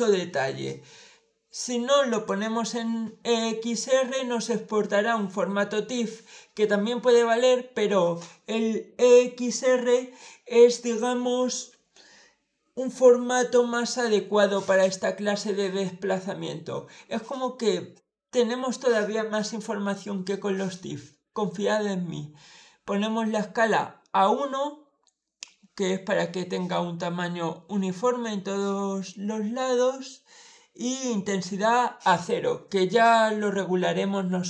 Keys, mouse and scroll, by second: 1.9 click.